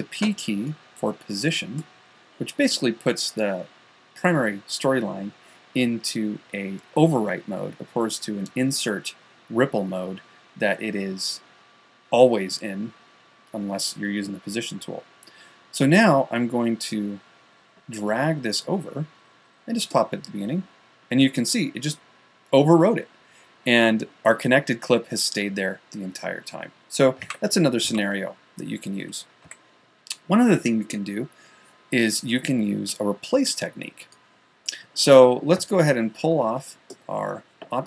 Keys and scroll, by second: 0.7 p, 27.7 super+z, 29.9 a.